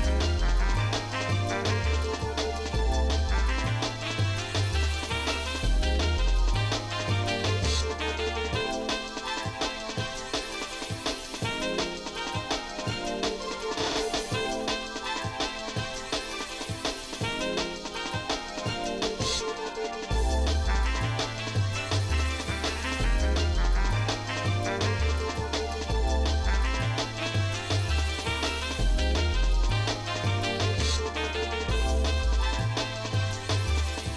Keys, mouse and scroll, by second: 0.2-0.6 scroll up 2, 0.9 alt+shift+click, 1.8 alt+shift+click, 2.9 alt+shift+click, 3.6 alt+shift+click, 4.1 alt+shift+click, 5.1 scroll down 2, 5.2 scroll up 1, 8.7 click, 9.3 scroll up 1, 10.6 click, 11.3-11.7 scroll down 2, 12.0 shift+middle click, 13.1-13.6 scroll up 3, 14.0 shift+click, 14.4 shift+click, 14.9 shift+middle click, 15.3 shift+middle click, 15.7-17.1 shift+middle drag, 17.3 shift+middle click, 18.7 KP_7, 20.1 middle click, 20.7 middle click, 21.3 z, 22.9 middle click, 24.3 ctrl+Tab, 26.5 shift+middle click, 27.3 shift+middle click, 27.8 middle click, 28.9-29.4 scroll up 2, 29.8 scroll up 2, 30.6 shift+middle click, 31.3-31.7 scroll down 3, 32.0 middle click, 32.4 z, 33.9 shift+middle click.